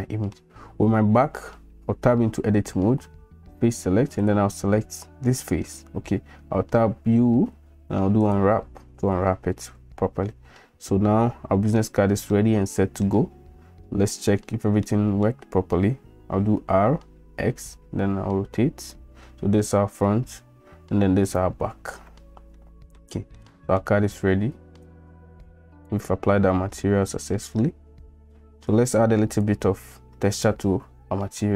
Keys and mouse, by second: 2.0 Tab, 4.2 click, 7.0 u, 11.3 Tab, 12.3 drag, 12.5-13.0 middle drag, 14.8 middle click, 16.5 r, 22.6 middle click, 23.3-23.8 middle drag, 24.8-25.9 drag, 28.9 click.